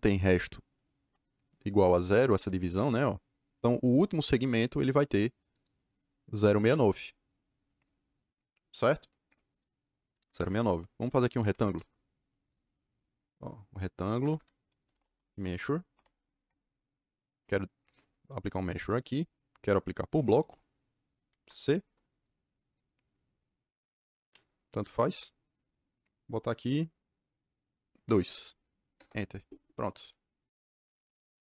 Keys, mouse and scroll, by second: 2.3 Return, 4.3 click, 5.5 click, 10.1 Escape, 10.3 Escape, 11.0-12.0 typing, 12.4 click, 13.7 click, 14.1 Escape, 14.2 Escape, 14.5-16.3 typing, 16.3 Return, 17.8 click, 20.1 b, 20.2 KP_Enter, 21.3 c, 21.8 KP_Enter, 24.8 KP_Enter, 28.0 KP_2, 28.9 KP_Enter.